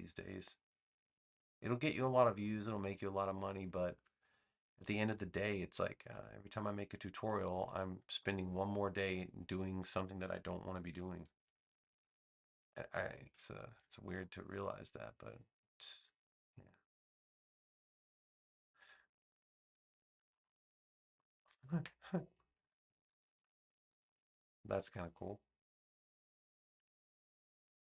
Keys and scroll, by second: 7.9 space, 10.8 super+j, 11.8 v, 13.7 space, 19.9 space, 22.5 super+-, 23.0 super+-.